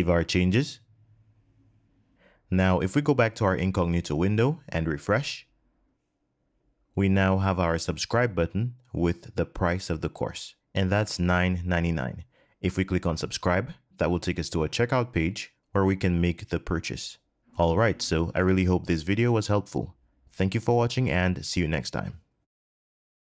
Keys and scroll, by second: 5.4 super+r.